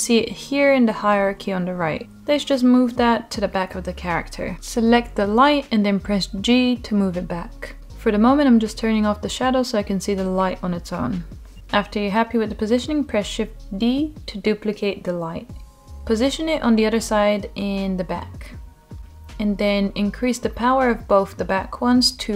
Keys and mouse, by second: 2.1-3.6 middle drag, 3.7 g, 6.2 middle click, 7.7 click, 8.4 click, 9.8 g, 11.8 shift+d, 15.5 click, 16.0-16.9 middle drag, 17.5 g, 18.2-18.5 drag, 18.6-19.3 middle drag, 20.0 middle click, 21.7-22.3 drag.